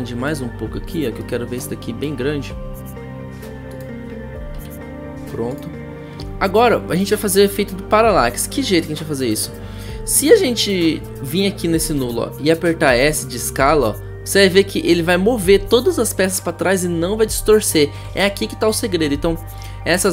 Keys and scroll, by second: 12.0 s, 17.9 ctrl+z.